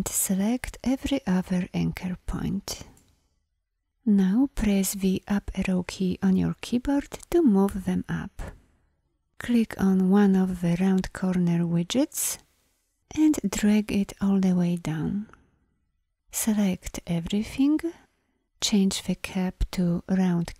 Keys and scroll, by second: 5.1 Up, 16.1 ctrl+a.